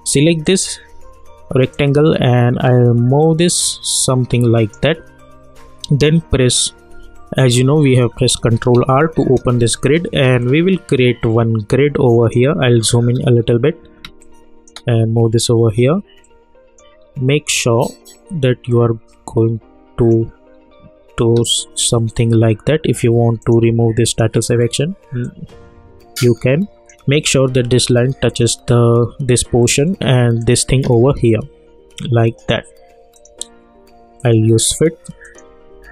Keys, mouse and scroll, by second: 1.7-7.0 drag, 8.7 ctrl+r, 10.4-12.9 drag, 12.9-14.0 alt+scroll up 2, 14.0 space, 14.2 click, 14.5 space, 16.2 click, 16.9-17.5 scroll up 1, 17.5-18.7 scroll down 1, 18.7-20.7 drag, 20.7-21.3 scroll down 1, 21.3 space, 21.4 click, 22.1 scroll up 1, 23.4-28.3 drag, 29.6-30.4 scroll down 1, 30.4 click.